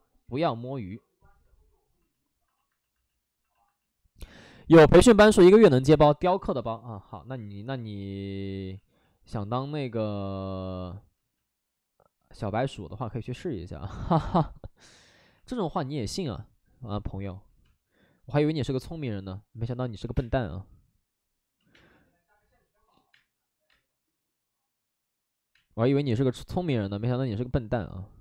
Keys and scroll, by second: 1.4 space, 5.1 space, 7.5 ctrl+z, 8.7 ctrl+z, 11.1 ctrl+z, 17.2 ctrl+z, 17.6 space, 19.6 space, 20.0 3, 20.1 space, 20.3 3, 21.5 ctrl+z, 21.6 space, 23.6 space, 25.5 space, 26.1 space.